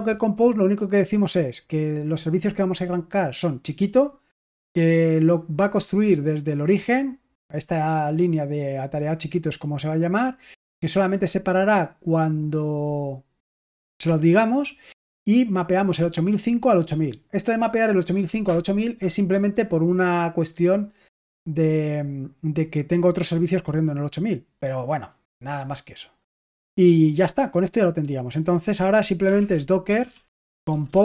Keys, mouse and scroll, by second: 1.8 click, 2.0 click, 3.1 click, 3.4 click, 4.8 click, 5.3 middle click, 7.8 click, 23.7 click, 23.9 click, 24.7 click, 28.9-31.0 typing.